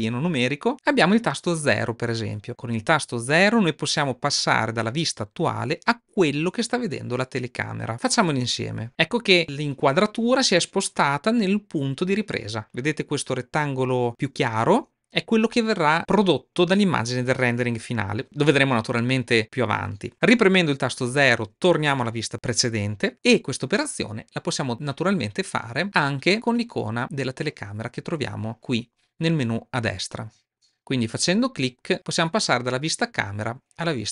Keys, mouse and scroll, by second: 8.9 KP_5, 20.9 KP_5, 30.4 click, 31.6 click.